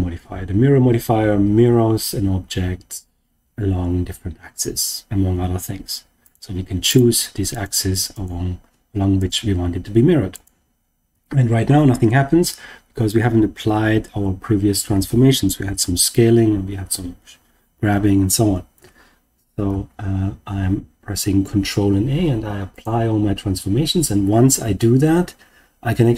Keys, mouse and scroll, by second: 6.2 click, 6.8 click, 7.5 click, 8.1 click, 9.1 click, 10.3 click, 19.6 ctrl+a.